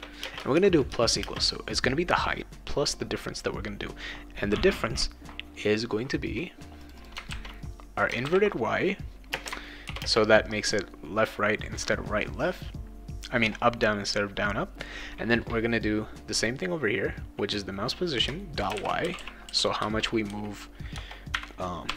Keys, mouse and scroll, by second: 0.0-1.2 typing, 6.8 click, 7.0 click, 8.0 click, 8.2 ctrl+v, 8.2-8.5 ctrl+scroll down 1, 9.3 space, 9.8 shift+9, 10.0 space, 18.4-21.8 typing, 19.8 Return.